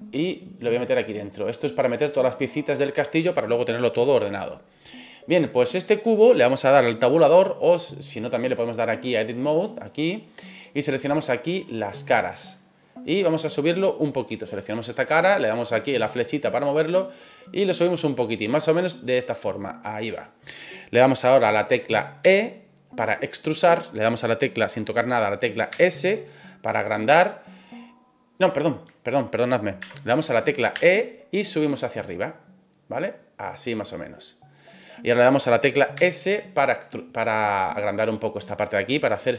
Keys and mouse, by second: 0.4 click, 5.1 right click, 8.2-9.6 drag, 11.6 click, 12.6 right click, 13.1 middle click, 16.9 click, 19.0 middle click, 20.3 middle click, 22.2 e, 25.7 s, 28.3 click, 29.8 ctrl+z, 30.7 e, 34.5 click, 35.9 s, 37.8 click, 38.8-39.3 middle drag.